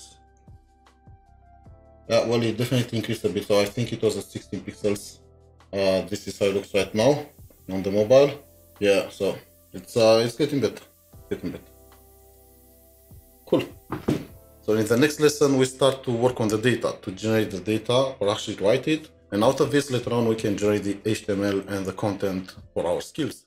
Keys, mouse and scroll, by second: 0.0-0.5 typing.